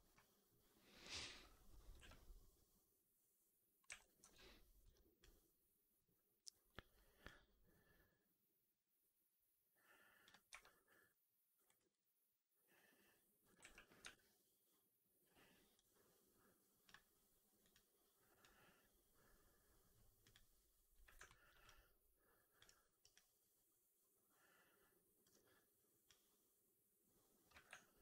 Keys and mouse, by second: 1.1 1, 1.8 r, 3.7 w, 4.1 4, 4.7 w, 5.1 click, 7.2-10.2 drag, 10.4 1, 11.6 r, 13.4 middle click, 13.5 w, 13.9 4, 15.7-16.7 drag, 20.1 click, 21.1 alt+middle click, 21.5-22.5 alt+drag, 22.5-22.9 alt+right drag, 23.0-25.1 alt+drag, 27.1-28.0 drag.